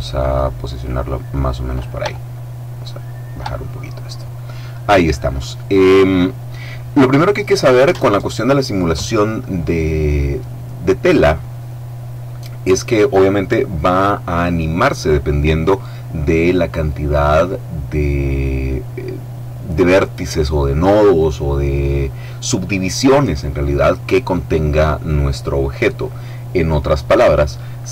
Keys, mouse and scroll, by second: 0.7-1.4 scroll up 1, 2.1-3.6 shift+middle drag, 3.6-4.1 shift+scroll up 1.